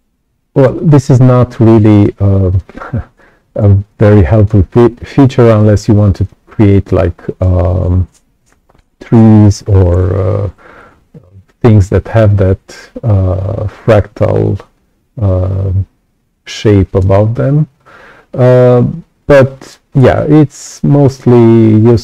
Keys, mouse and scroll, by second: 0.9 ctrl+z, 1.7 ctrl+z, 2.4-4.4 right drag, 2.5 click, 3.8 click, 4.7-5.0 scroll up 2, 5.1-6.2 right drag, 5.5 click, 14.4-16.9 right drag, 14.6-16.9 drag, 18.3-19.6 right drag, 18.4 click, 19.8-20.2 scroll down 2, 20.7 right click.